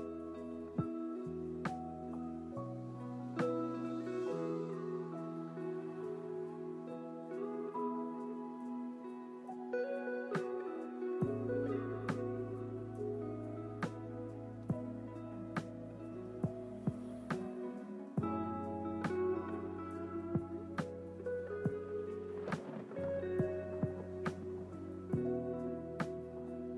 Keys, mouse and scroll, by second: 4.0 click, 5.0 click, 7.8 click, 10.6 click, 11.6 click, 12.9 g, 17.0 click, 19.7-20.8 scroll up 3, 20.8-22.1 scroll down 1, 25.2-25.8 scroll down 1, 25.8-26.7 scroll down 1.